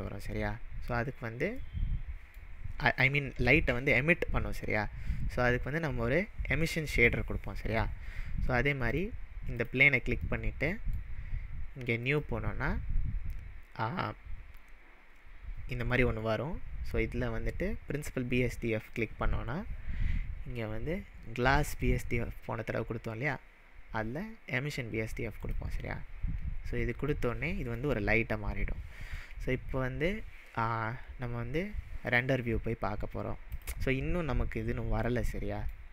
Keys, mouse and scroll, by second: 1.7-2.5 middle drag, 3.4-5.2 scroll down 2, 5.2-6.4 scroll down 1, 8.8 scroll down 1, 8.9 click, 9.6 click, 10.4-11.1 middle drag, 12.0-15.1 drag, 18.9-21.9 drag, 25.4 click, 27.2-28.0 middle drag, 32.1 click, 33.5 click, 35.0-35.9 middle drag.